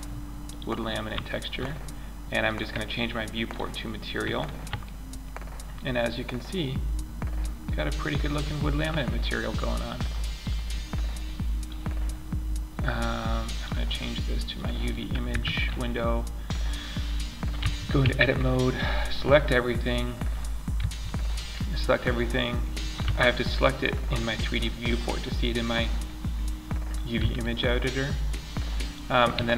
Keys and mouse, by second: 1.8 click, 3.7-4.6 middle drag, 5.6-6.3 middle drag, 6.9-7.8 middle drag, 9.8-10.4 middle drag, 11.7-12.9 middle drag, 14.6 Tab, 15.0 middle click, 16.9 a, 17.3 a, 20.1 a, 22.4 a, 26.6 a, 28.7 s.